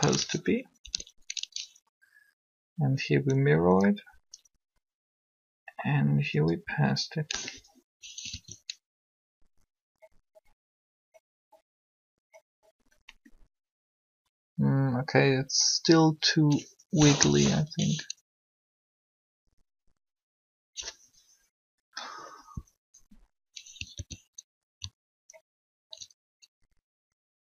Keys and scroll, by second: 0.8 Up, 4.0 Up, 8.3 alt+a, 17.0 3, 23.8 alt+a.